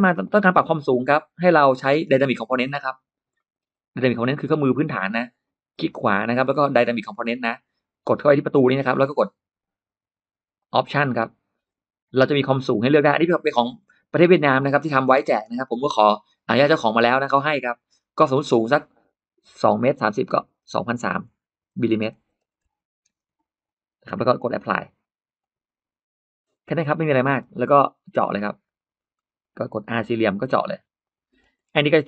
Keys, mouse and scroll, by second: 0.1-1.0 scroll up 2, 0.1 middle click, 2.3 click, 3.2 middle click, 4.3 click, 5.5 right click, 8.3 click, 10.4 click, 12.3 scroll down 1, 13.6-13.9 scroll up 1, 17.8 click, 20.5-23.9 typing, 25.2 click, 26.4 middle click, 26.9 scroll down 1, 27.2 space, 27.2 click, 27.5-27.8 scroll up 1, 28.0 click, 28.2 click, 28.3 click, 28.5 click, 29.0-29.6 scroll up 1, 29.6 middle click, 30.9 click, 31.2 middle click, 31.9 scroll up 2.